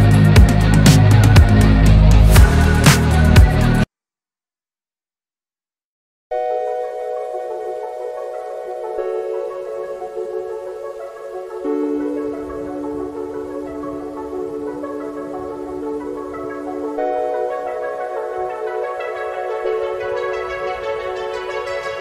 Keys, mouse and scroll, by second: 0.1 click, 1.5 click, 2.3-2.8 scroll down 7, 2.8 middle click, 3.0 click, 3.5 shift+c, 3.8 shift+middle click, 4.3 shift+a, 5.1-5.6 scroll up 3, 5.6 shift+middle click, 5.9 scroll up 3, 6.1 click, 7.1 g, 7.6 shift+click, 8.2 ctrl+p, 8.9 click, 9.4 g, 9.8-10.2 scroll down 5, 9.9 click, 10.2 middle click, 10.3 scroll up 2, 10.4-11.5 drag, 11.5 s, 12.2 KP_7, 12.3 scroll up 1, 12.7 shift+middle click, 13.0 click, 13.6 s, 14.3 scroll up 1, 14.4 shift+middle click, 15.2 scroll down 3, 15.4-17.4 drag, 17.4 KP_0, 18.0-18.5 scroll down 7, 18.2 middle click, 18.5 middle click, 18.6 scroll up 1, 18.8 scroll down 1, 18.9 shift+middle click, 19.2 click, 19.9 alt+g, 20.0 alt+r, 20.3 scroll down 1, 20.4 shift+middle click, 20.6 scroll up 3, 20.7 shift+middle click, 21.0 click.